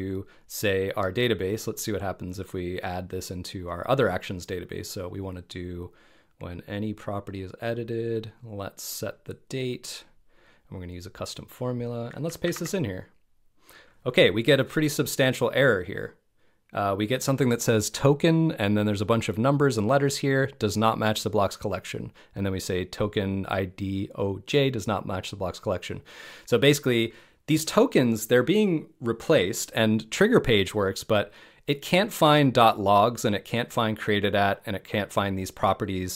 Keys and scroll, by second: 12.4 super+v, 13.0 super+v.